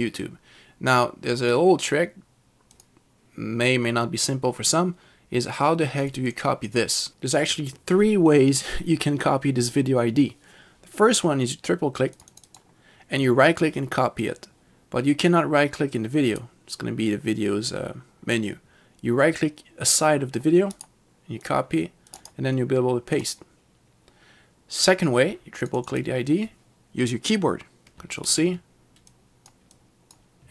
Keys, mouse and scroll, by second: 2.8 click, 6.1 click, 6.3 double click, 6.4 click, 7.1 click, 12.1 click, 12.5 double click, 16.4 right click, 20.8 right click, 21.5 click, 23.2 click, 25.7 click, 26.0 double click, 28.3 ctrl+c, 29.2 click, 29.8 click.